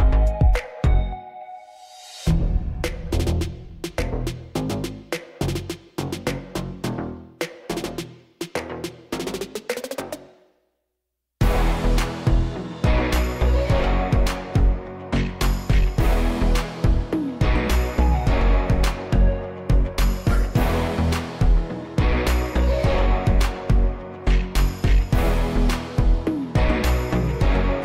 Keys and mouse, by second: 0.6-1.3 middle drag, 2.8 s, 4.0 shift+z, 7.3 KP_7, 8.3 g, 9.5-11.0 middle drag, 11.4 KP_7, 13.0 shift+d, 14.4 shift+d, 15.8 shift+d, 17.2 shift+d, 18.6 shift+d, 21.2 click, 21.8 g, 22.9-24.3 middle drag, 26.1 click.